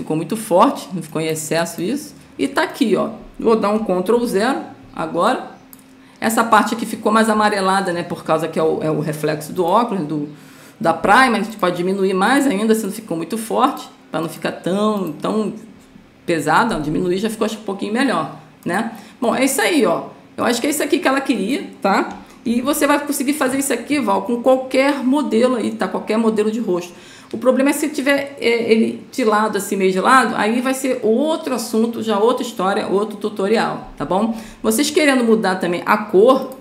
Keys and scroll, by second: 4.5 ctrl+0, 22.8 ctrl+0.